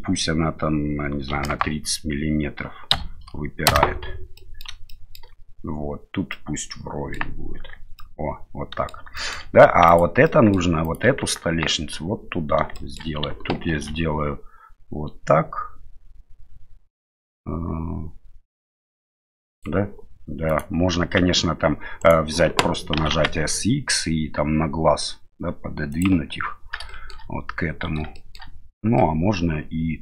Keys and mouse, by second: 4.3 middle click, 4.9 shift+middle click, 6.3 middle click, 7.5 Tab, 8.0 middle click, 9.2 shift+middle click, 9.9 right click, 10.2-10.5 middle drag, 10.8 right click, 11.2 Tab, 12.7 shift+middle click, 13.7 ctrl+r, 21.0 s, 23.0 s, 26.9 shift+middle click, 28.1 shift+middle click, 29.0-30.0 middle drag.